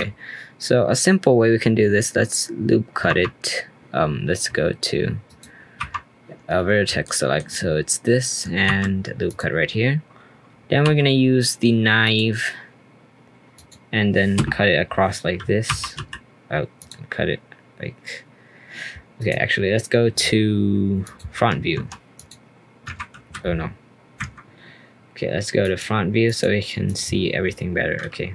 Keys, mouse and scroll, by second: 5.8 1, 6.6-7.0 scroll up 2, 7.0-8.6 shift+middle drag, 8.6 ctrl+r, 10.8 k, 15.7 l, 15.9 k, 24.1 Escape, 25.6 click, 26.2 click, 26.8 click, 27.1-27.7 scroll up 1, 27.7-28.3 scroll up 2.